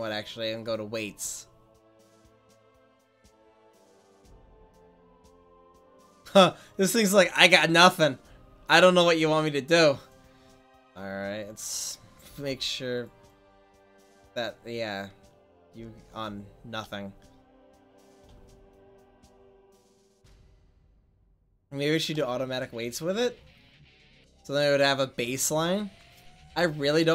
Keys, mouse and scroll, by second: 1.7 middle click, 7.4 right click, 7.9 right click, 8.1 middle click, 12.5 f, 13.0 click, 15.8-16.6 middle drag, 21.7-24.1 middle drag, 26.7-27.1 right drag.